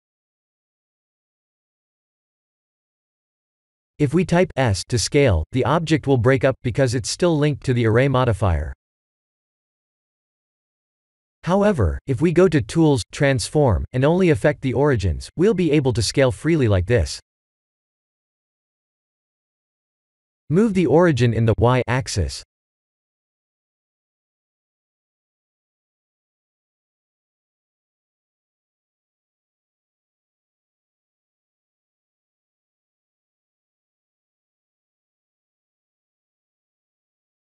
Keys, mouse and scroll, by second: 0.9 click, 3.5 click, 4.0 click, 4.3 middle click, 9.1 click, 10.5 n, 11.9 click, 15.5 click, 16.6 shift+middle click, 18.2 click, 21.2 KP_7, 22.9 click, 34.2 middle click, 35.0 middle click, 35.4 ctrl+z, 35.8 middle click.